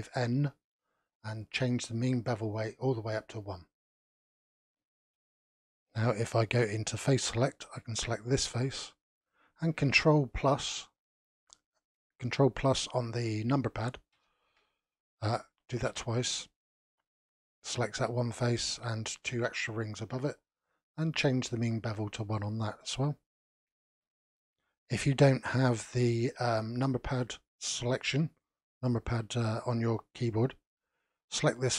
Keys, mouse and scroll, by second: 2.4-4.1 drag, 4.1-7.2 middle drag, 7.2 3, 8.1 click, 14.1 ctrl+KP_Add, 15.9 ctrl+KP_Add, 17.2 scroll up 3, 21.0-23.5 drag, 23.5-24.0 scroll down 1, 24.0-25.6 shift+middle drag, 25.6 click, 28.6-29.5 scroll up 1, 29.5-31.7 shift+middle drag.